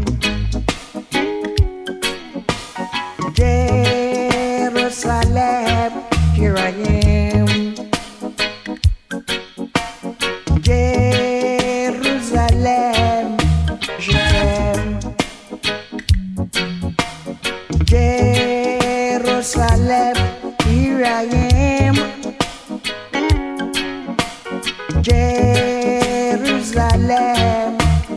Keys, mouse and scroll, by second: 0.8 shift+click, 2.9 click, 4.3-4.7 alt+scroll, 10.8 click, 21.8 click.